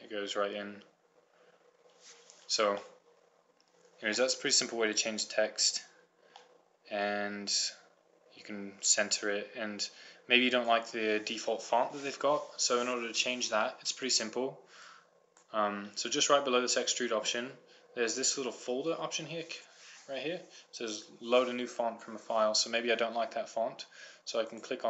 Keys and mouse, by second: 1.9-3.4 middle drag, 6.0 middle click, 6.8-10.2 middle drag, 10.2-11.4 drag, 15.2-17.1 drag, 24.8 click.